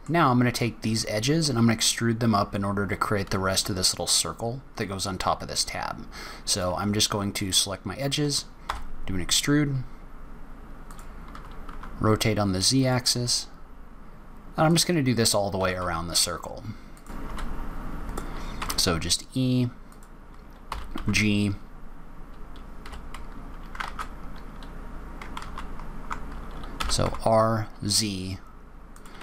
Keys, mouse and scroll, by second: 3.3-4.1 scroll down 9, 4.1-4.7 scroll up 6, 5.0-5.4 scroll up 2, 6.4 click, 7.4 shift+click, 8.6 e, 11.2 r, 13.0 e, 15.5 r, 17.1 e, 17.8 r, 18.5 e, 20.6 g, 23.7 ctrl+z, 25.2 ctrl+z, 26.7 r, 29.1 e.